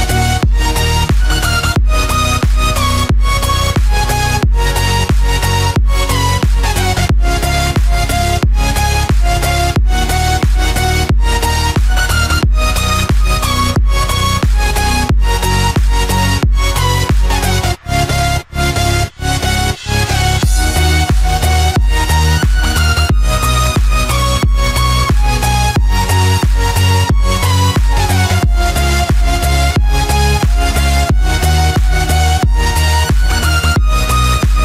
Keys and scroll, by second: 2.0 ctrl+-, 5.2 ctrl+=, 10.1 Return, 25.1 ctrl+-, 28.7 ctrl+=, 34.1 ctrl+z.